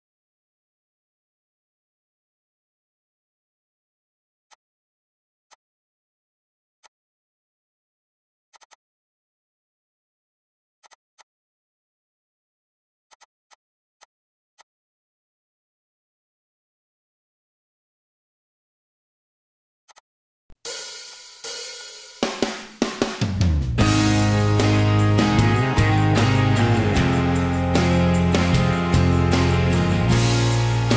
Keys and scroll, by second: 4.1 r, 6.6-7.9 typing, 8.1 Return, 8.2 Escape, 9.2 ctrl+g, 11.0 p, 12.3 8, 12.5 Return, 13.0 Escape, 13.5 p, 14.8 Escape, 21.4 m, 26.9 p, 28.3-29.2 typing.